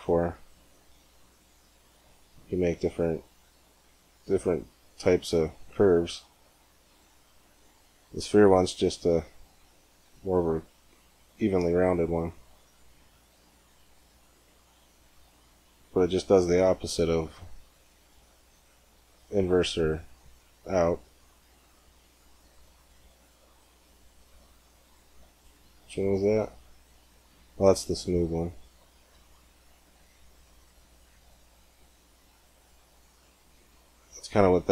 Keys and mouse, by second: 2.9-4.9 drag, 5.5 g, 17.0-18.8 drag, 20.7 g, 26.2-27.9 drag, 27.9 g, 33.5-34.7 middle drag.